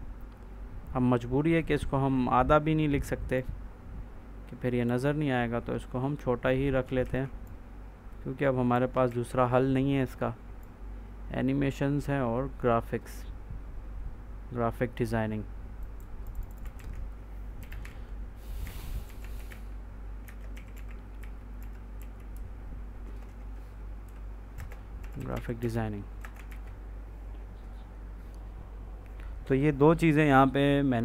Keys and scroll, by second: 6.9 ctrl+s, 8.9 ctrl+s, 16.6 ctrl+a, 17.2-22.7 typing, 20.1 Return, 23.9-26.1 typing, 26.3 ctrl+s.